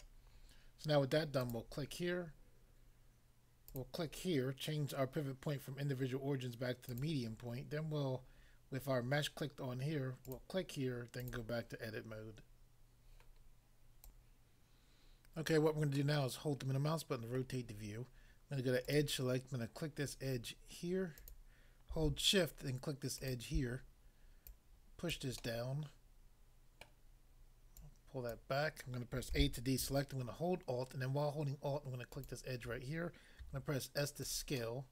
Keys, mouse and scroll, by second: 1.4 click, 1.5 click, 3.7 click, 3.8 click, 6.8 click, 7.0 click, 10.2 click, 10.3 click, 11.2 click, 11.3 click, 14.0 click, 16.0 middle click, 17.4 middle click, 18.9 click, 19.0 click, 21.2 click, 21.3 click, 23.1 shift+click, 23.4 shift+click, 24.4 shift+click, 25.1 click, 25.4 middle click, 26.8 middle click, 27.8 click, 28.3 click, 29.3 a, 32.1 alt+click, 33.4 s, 34.2 click, 34.6 middle click.